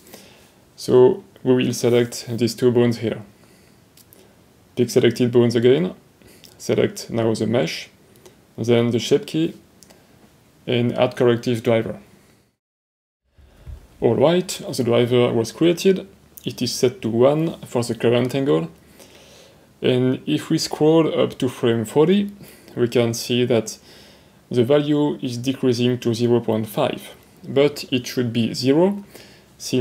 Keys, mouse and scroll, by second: 0.7 click, 1.9 shift+click, 4.7 middle click, 12.0 click, 24.1 click.